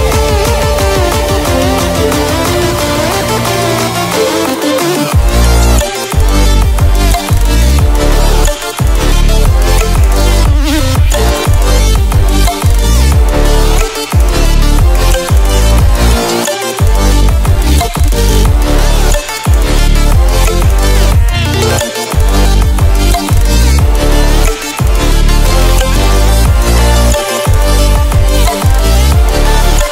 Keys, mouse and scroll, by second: 0.5-3.4 drag, 25.7-29.9 drag.